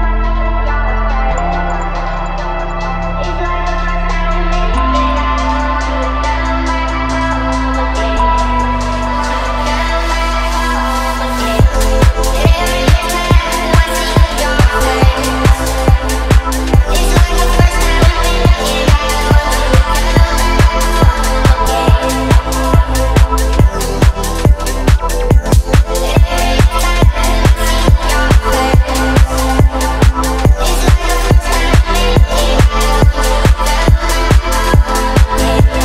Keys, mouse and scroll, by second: 0.4 a, 1.4 t, 3.7 space, 4.7 click, 6.2 drag, 7.1 s, 10.1 KP_0, 10.4 click, 11.2 click, 11.7 click, 12.2 s, 12.9 KP_0, 13.3 click, 14.1 space, 19.2 click, 20.0-21.9 scroll down 1, 24.4-24.8 scroll down 1, 24.8-25.1 scroll up 1, 25.1-25.4 scroll down 1, 25.4-26.7 scroll up 1, 26.7 click, 27.1 click, 28.1 space, 29.3 click, 31.9 click, 32.8 middle click, 33.4 click, 33.7 middle click, 34.1 shift+a.